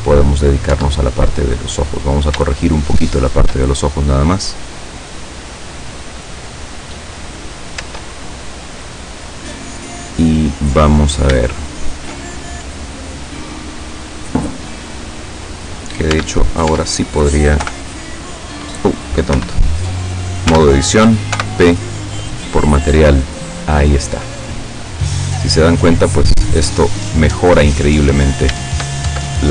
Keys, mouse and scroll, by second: 0.4 right click, 0.8 Tab, 1.5 scroll down 2, 2.8 shift+middle click, 5.1 right click, 7.9 Tab, 8.5 right click, 10.8-11.1 scroll down 2, 11.5 shift+middle click, 11.6 shift+click, 14.6 right click, 16.2 Tab, 17.7 p, 19.4 Escape, 20.6 Tab, 21.4 p, 22.5 click, 23.8 scroll down 1, 24.3-27.8 middle drag, 28.0-28.4 scroll up 1, 29.1 shift+Tab.